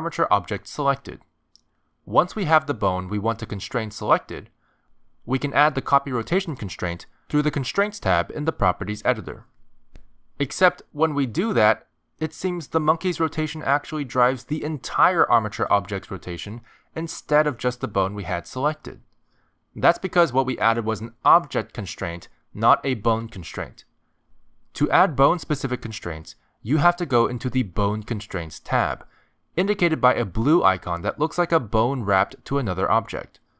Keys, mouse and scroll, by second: 0.0 ctrl+Tab, 8.5 click, 10.9 click, 13.0 click, 14.0 ctrl+Tab, 14.5 click, 15.2 r, 16.3 r, 20.2 r, 21.5 click, 26.8 click, 33.2 click.